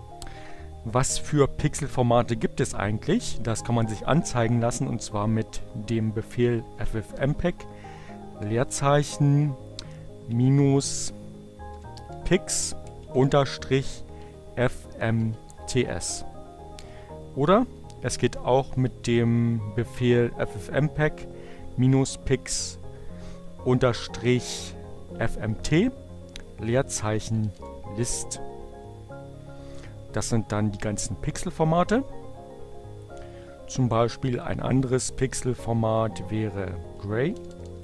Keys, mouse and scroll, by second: 4.5-5.9 typing, 7.4 space, 9.7-15.6 typing, 22.9 BackSpace, 25.2-27.5 typing, 32.8 Up, 34.3 BackSpace, 35.8 Right, 36.7 BackSpace.